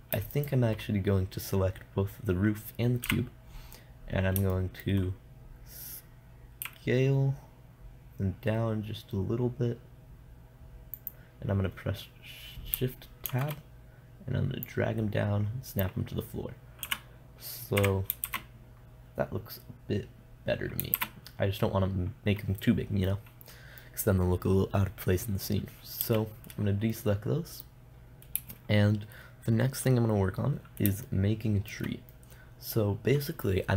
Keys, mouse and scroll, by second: 0.8-2.7 right drag, 3.5 KP_0, 4.5 click, 7.1 s, 11.6-13.7 drag, 13.7 shift+Tab, 13.7-15.1 middle drag, 15.1-16.9 drag, 16.9 middle click, 17.3 KP_0, 18.3 KP_0, 18.7 shift+z, 19.0-21.4 middle drag, 21.4 shift+z, 21.9-23.8 middle drag, 26.5 a, 26.9-32.1 middle drag.